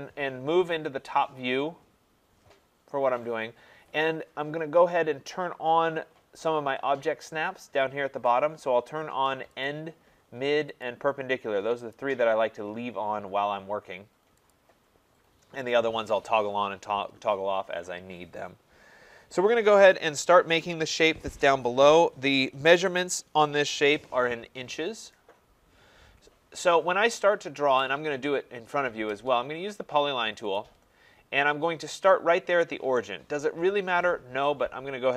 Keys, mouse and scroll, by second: 9.7 click, 10.9 click, 12.0 click, 14.5 click, 30.6 click.